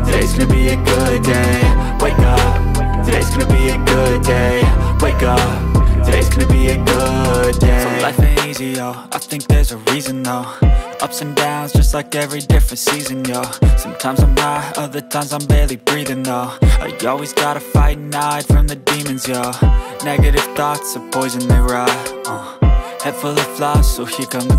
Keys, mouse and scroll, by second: 0.9 ctrl+alt+z, 1.3 right click, 3.1 1.